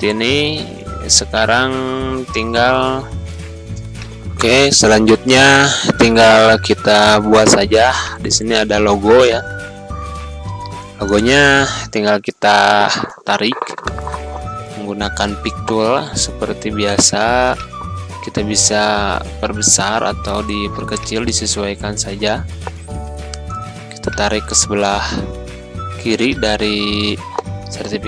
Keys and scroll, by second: 18.7 3, 18.9 0, 19.1 Return, 22.2 t, 23.0 l, 27.3 1, 27.5 Return.